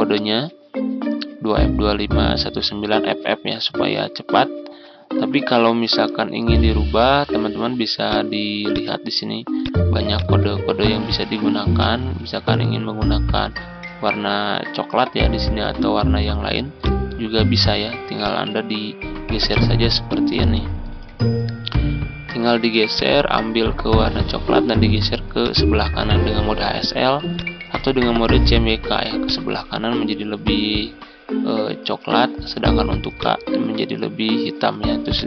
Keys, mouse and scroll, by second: 3.8-34.7 drag.